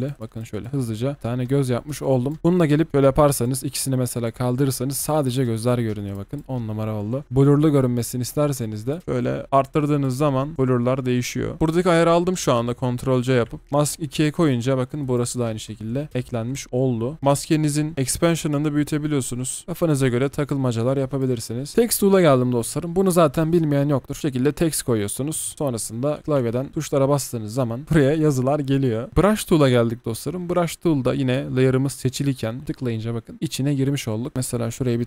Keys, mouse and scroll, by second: 2.4 double click, 4.8 alt+scroll down 1, 5.3-6.2 alt+scroll up 1, 6.3 double click, 9.0 double click, 15.8-16.1 alt+scroll down 1, 16.1-16.9 alt+scroll up 1, 16.9 alt+scroll down 1, 21.7 Delete, 26.4 typing, 29.1 Delete, 34.3 alt+scroll up 1.